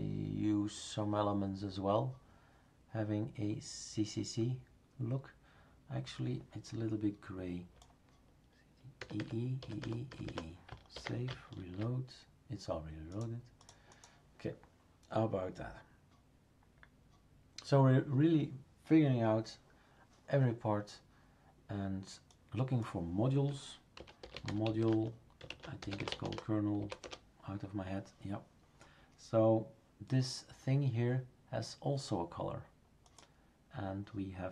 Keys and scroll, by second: 9.0-10.9 typing, 23.7-27.3 typing.